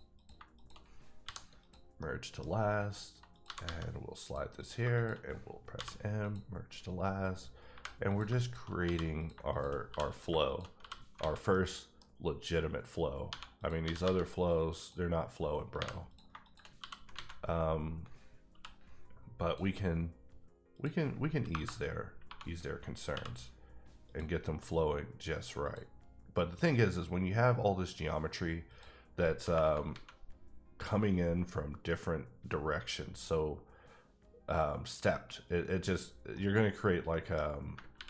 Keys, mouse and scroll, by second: 0.1 click, 0.5 shift+click, 1.2 m, 1.6 click, 2.0 middle click, 3.3 click, 3.4 g, 3.6 g, 4.2 click, 4.6 click, 4.9 shift+click, 5.7 m, 6.2 click, 7.7 3, 8.1 click, 8.2 shift+click, 8.8 f, 9.2 click, 9.3 shift+click, 9.7 shift+click, 9.8 f, 10.1 click, 10.8 f, 11.2 alt+a, 11.5 middle click, 13.3 1, 13.6 click, 13.8 g, 14.0 g, 14.7 click, 15.8 3, 16.1 click, 16.3 shift+click, 16.8 f, 17.1 alt+a, 18.5 k, 19.4 click, 20.7 click, 21.5 KP_Enter, 23.1 1, 24.0 click, 25.6 click, 28.7 click, 29.4 KP_Enter, 29.9 alt+a, 36.0-36.3 scroll down 1, 36.3 middle click, 36.8-37.3 scroll down 1, 37.8 ctrl+scroll down 1, 37.9 ctrl+r.